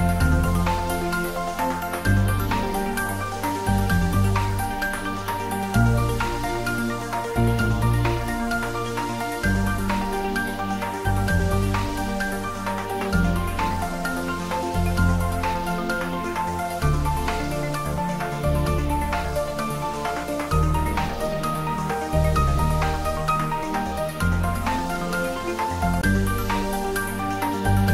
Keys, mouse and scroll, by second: 2.0 s, 5.0 typing, 6.1 Return, 7.4 click, 8.6 ctrl+s, 10.8 click, 16.3-17.8 scroll up 1, 19.8-22.1 drag, 22.4-25.3 drag, 25.8-27.9 drag.